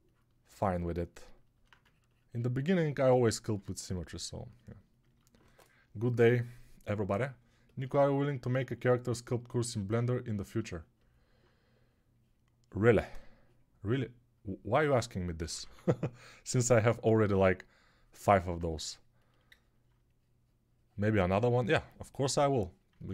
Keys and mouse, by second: 15.3 [, 15.4 [, 15.5 [.